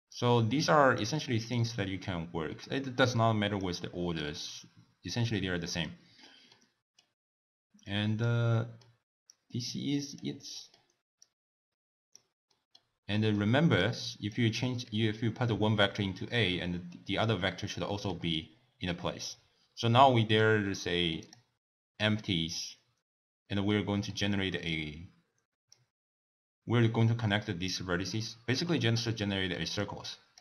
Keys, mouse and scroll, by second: 0.1 click, 1.5 click, 4.1 click, 6.5-7.8 middle drag, 7.8 click, 8.5-9.3 middle drag, 9.3 click, 10.5-11.2 middle drag, 11.2 click, 12.5-13.8 middle drag, 13.8 click, 15.8 click, 17.8-18.6 middle drag, 18.6-19.6 scroll up 1, 19.6 scroll up 1, 20.3 click, 21.1 click, 23.7-24.6 middle drag, 24.6 click, 28.8-29.8 middle drag, 29.8 click.